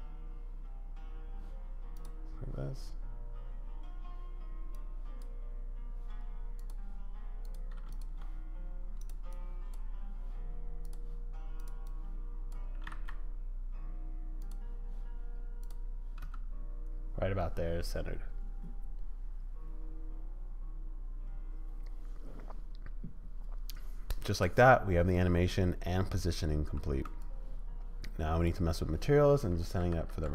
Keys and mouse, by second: 2.0-5.2 drag, 7.4 click, 9.3 click, 10.8 click, 11.9 click, 12.7 g, 15.6 click, 16.2 space, 26.9 space, 27.2-28.5 drag, 30.0 ctrl+s.